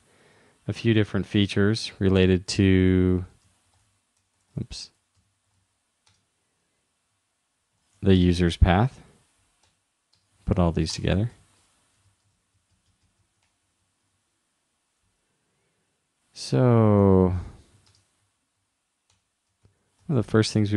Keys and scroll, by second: 7.3-8.3 typing, 12.1 super+Left, 12.3 shift+Down, 12.8 shift+Down, 14.2 super+Right, 19.6 shift+2.